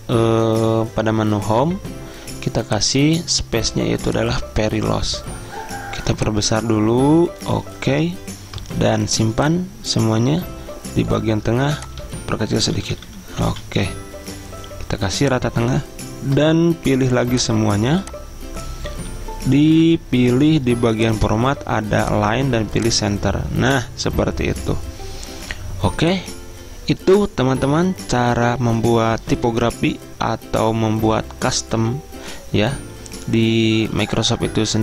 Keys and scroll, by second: 12.1 ctrl+a, 12.8 ctrl+[, 13.0 ctrl+[, 13.6 ctrl+[, 19.0 ctrl+[.